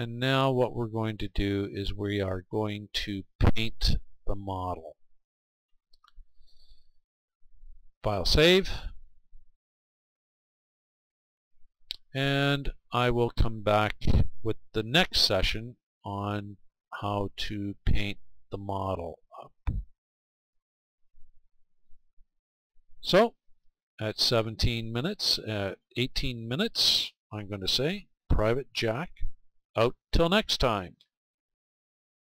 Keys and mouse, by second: 9.0-19.9 drag.